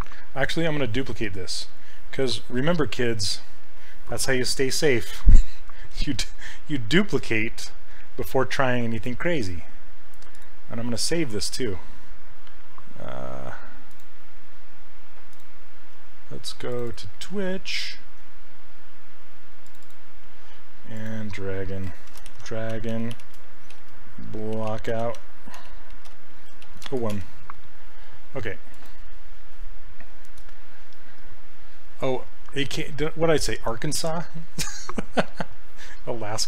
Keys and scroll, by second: 21.9-27.6 typing.